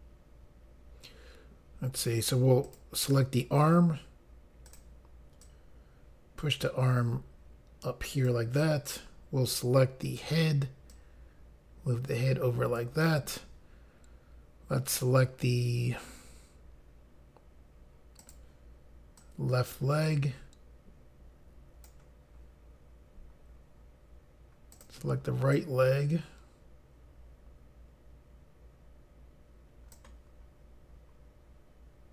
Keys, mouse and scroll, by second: 2.7 click, 4.7 click, 5.4 click, 10.1 click, 10.9 click, 18.2 click, 19.2 click, 24.7 click, 25.5 click.